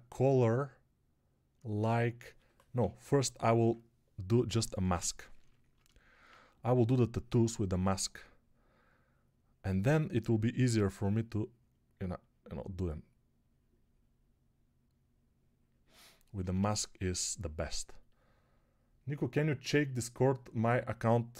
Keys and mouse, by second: 3.1 [, 3.2 [, 3.3 [, 3.5 [, 4.7 m, 16.3 ], 16.4 ], 16.6 ].